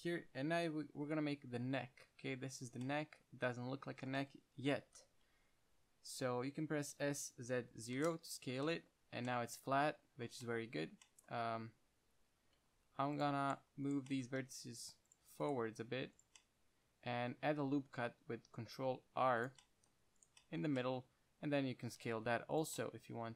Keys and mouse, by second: 0.9 KP_1, 1.8 e, 2.9-5.0 middle drag, 5.1 KP_1, 7.2 s, 8.9-9.6 drag, 12.9 ctrl+Tab, 14.6 g, 15.4-16.3 drag, 15.4-16.3 right drag, 15.9 g, 16.7 middle click, 17.8 ctrl+r, 20.7-21.1 drag, 21.6 s, 23.0-23.3 drag.